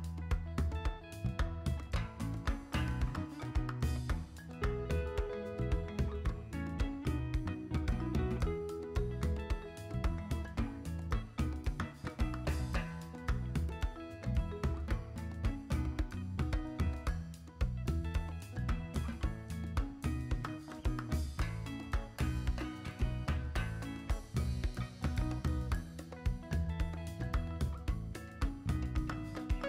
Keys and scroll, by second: 16.1 x, 17.5 v.